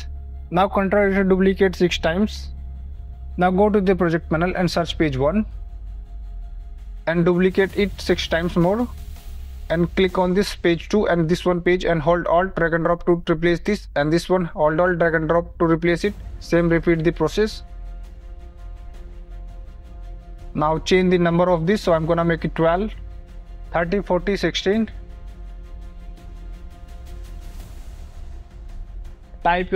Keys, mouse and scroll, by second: 0.1 click, 1.7 ctrl+d, 2.8 ctrl+d, 4.6 click, 5.6-6.9 typing, 5.7 click, 7.5 click, 8.5 ctrl+d, 10.3 click, 13.4 click, 14.8 alt+click, 16.1 click, 16.8 click, 17.1 click, 17.5 alt+click, 18.2 click, 19.4 alt+click, 19.7 click, 20.3 click, 23.7 scroll down 2, 24.3 click, 25.2 click, 26.0 KP_4, 26.2 click, 26.9 5, 27.2 click, 28.1 KP_6, 28.5 click, 29.2-29.7 typing.